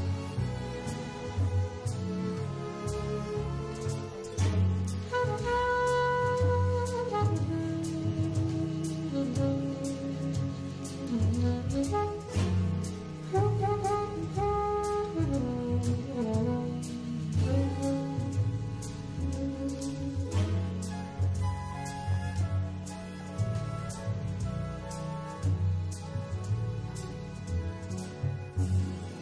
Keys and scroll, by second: 4.7 8, 5.8 7, 7.9 super+f, 12.1 shift+super+9, 13.7 super+space, 18.2 3, 21.4 1.